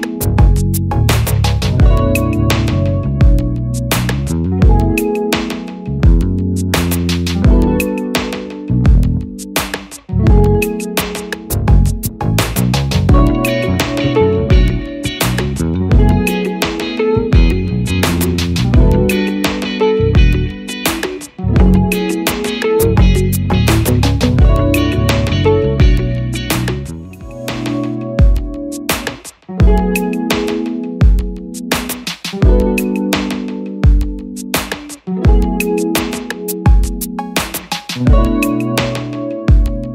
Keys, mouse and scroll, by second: 22.8 double click, 25.4 Return.